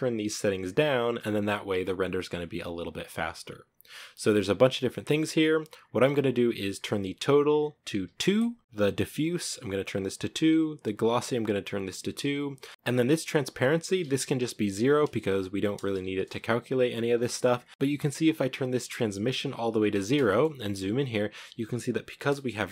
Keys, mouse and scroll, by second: 8.3 click, 9.3 click, 11.4-12.4 drag, 15.7-17.2 drag, 17.2 middle click, 17.5 scroll up 1, 17.7-19.7 drag, 19.7-20.2 scroll up 1, 20.2 shift+middle click, 20.5-20.9 scroll up 1.